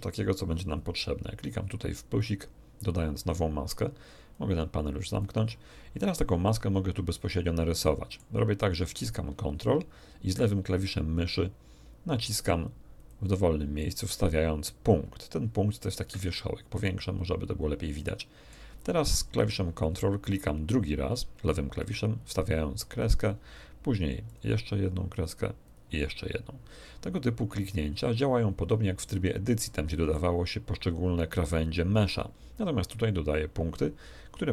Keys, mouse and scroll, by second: 2.1 click, 4.3 click, 7.3-8.3 middle drag, 12.9 ctrl+click, 15.9 shift+space, 16.7-17.2 shift+scroll up 2, 17.9 middle click, 21.7 ctrl+click, 24.3 ctrl+click, 25.6 ctrl+click, 29.5 middle click.